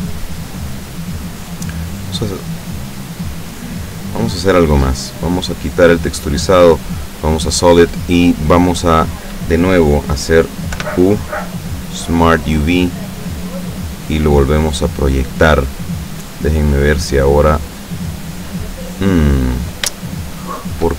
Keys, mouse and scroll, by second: 0.2 click, 5.7 click, 6.9 click, 10.9 u, 12.0 click, 13.2 click, 14.4 click, 16.8 click, 17.8 click, 20.1 shift+middle click.